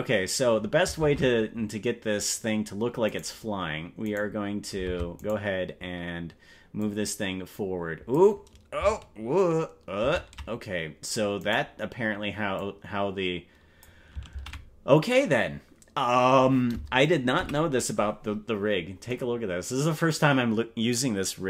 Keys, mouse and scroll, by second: 1.1 ctrl+Tab, 3.3 right click, 4.1 right click, 4.9 ctrl+Tab, 5.3 right click, 6.9 click, 10.5 ctrl+z, 11.5 right click, 12.5-13.9 drag, 14.7 ctrl+z, 17.3 KP_Decimal, 18.7-19.1 scroll down 4.